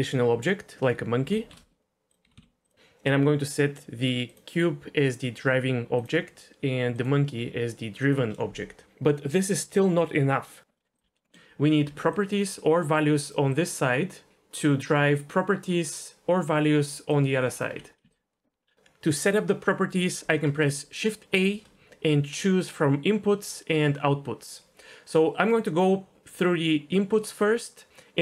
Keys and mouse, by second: 2.3 g, 2.4 x, 4.3-6.0 drag, 6.9-8.1 drag, 10.8 middle click, 10.9 d, 11.1 ctrl+z, 11.3 middle click, 11.9 d, 12.1-13.3 drag, 13.3-18.0 typing, 13.5 click, 14.6-16.8 drag, 17.1 click, 21.4 shift+a.